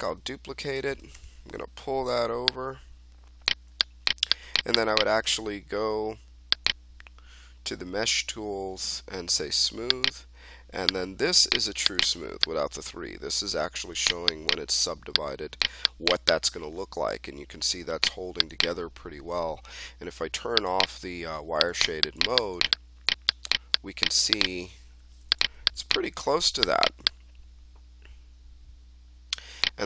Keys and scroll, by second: 1.1 w, 24.9 3.